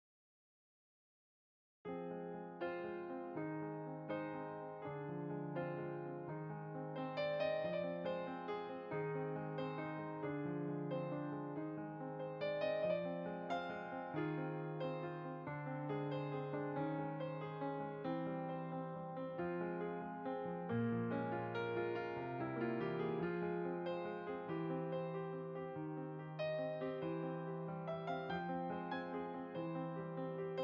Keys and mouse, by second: 3.4 middle click, 4.2 click, 5.9 shift+click, 7.2 middle click, 10.4 click, 11.5 shift+click, 13.4 click, 18.2 click, 19.2 shift+r, 20.0 click, 20.7 ctrl+r, 21.2 shift+click, 21.8 middle click, 22.6 shift+click, 23.1 middle click, 24.1 click, 25.6 shift+click, 26.4 middle click, 27.8 f, 28.0 click, 29.4 middle click.